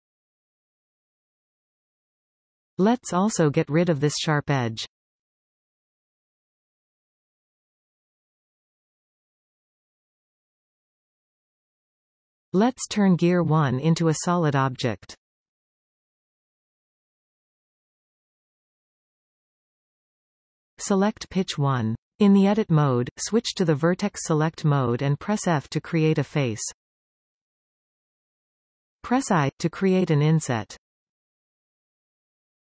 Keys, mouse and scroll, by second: 1.4 click, 2.4 click, 3.2 click, 3.7-5.0 middle drag, 5.0 scroll up 1, 6.7 ctrl+b, 11.7-12.6 scroll down 1, 13.1 Tab, 14.4-15.7 scroll down 2, 16.5-19.0 middle drag, 19.0 click, 19.9-21.5 middle drag, 21.5 click, 24.2 Tab, 25.5 click, 27.1 f, 30.1 i.